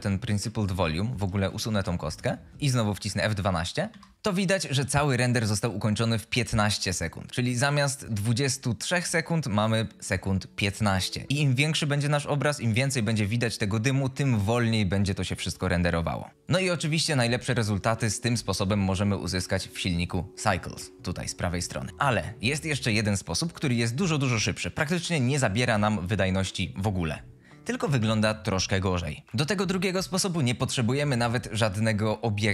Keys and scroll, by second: 1.4 x, 3.8 F12, 17.7 ctrl+z.